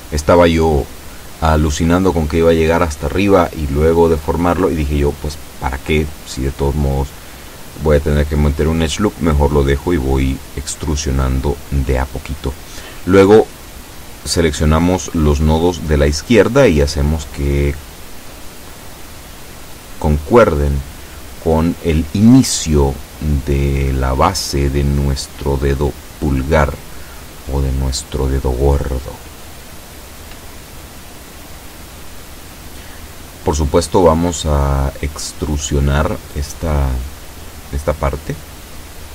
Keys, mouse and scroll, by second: 8.8 a, 9.6 b, 10.3-12.1 drag, 14.0-22.0 drag, 26.0 b, 27.0-29.9 drag, 36.7 e.